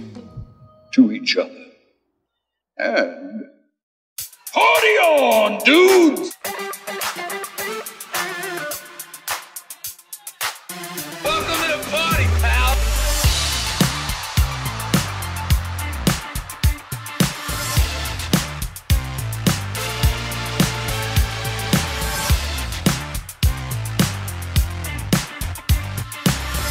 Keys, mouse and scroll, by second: 0.2 x, 1.5 click, 3.1 ctrl+z, 3.6 ctrl+z, 3.7 ctrl+z, 3.9 ctrl+z, 5.6 click, 8.3 g, 8.5 x, 12.3 click, 12.7 middle click, 13.1 Tab, 13.9-20.1 drag, 21.0-21.6 drag, 22.0-22.6 drag, 22.4-23.1 typing, 24.3 ctrl+z, 24.9-26.3 drag.